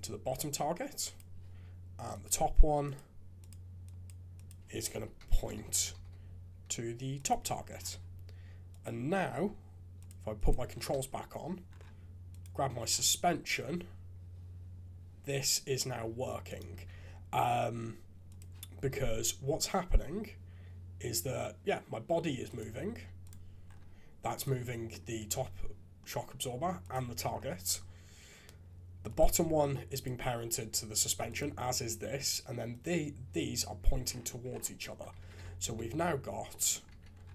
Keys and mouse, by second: 1.1 click, 2.3-2.9 drag, 3.4 click, 4.4-7.3 drag, 8.7 click, 9.9 click, 10.4 click, 10.9 shift+z, 12.4 click, 13.2 g, 16.7 shift+z, 18.2 click, 18.9 g, 24.4-26.0 drag, 29.9 click, 35.2 alt+a, 35.6 alt+g, 36.5 click, 36.9 shift+z.